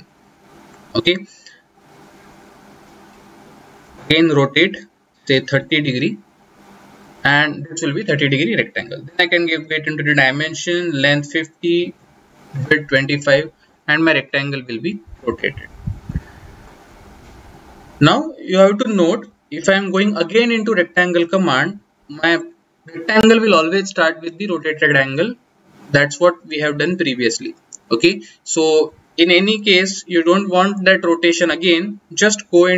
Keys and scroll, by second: 3.7 r, 3.8 space, 9.2 d, 9.4 Return, 18.5-19.7 typing, 32.4 r.